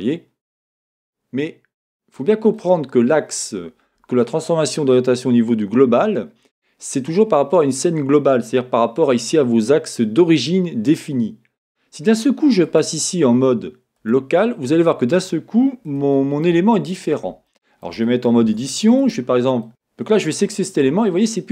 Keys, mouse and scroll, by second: 2.6-12.6 middle drag, 12.6-16.0 drag, 16.0-19.0 shift+middle drag, 16.6 scroll, 18.4 Tab, 19.0 click, 19.6 middle click, 20.2 click, 20.3-21.5 middle drag.